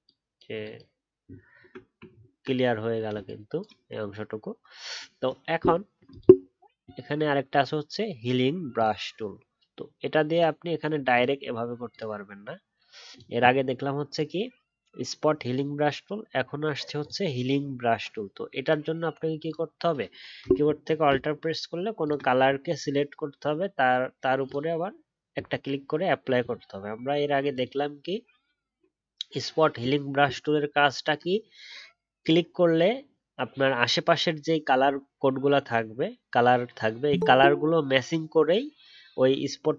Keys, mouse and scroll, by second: 1.2-2.0 alt+scroll down 1, 2.0-3.3 alt+scroll up 4, 22.0 alt+click, 30.7 alt+scroll up 1.